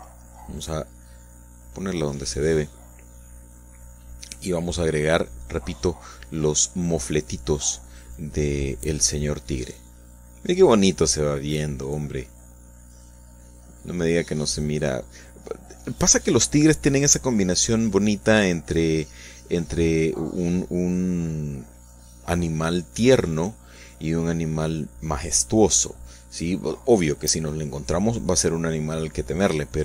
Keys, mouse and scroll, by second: 0.8 3, 2.2 click, 4.5 click, 5.3 click, 5.8 click, 18.7 shift+click, 19.4 shift+click, 20.3 shift+click, 21.4 click, 21.9 click, 22.6-24.0 drag, 28.7-29.7 shift+middle drag.